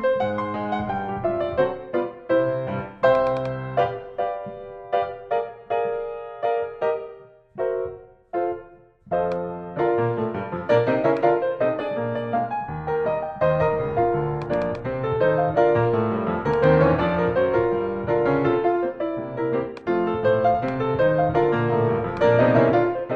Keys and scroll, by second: 3.8 Return.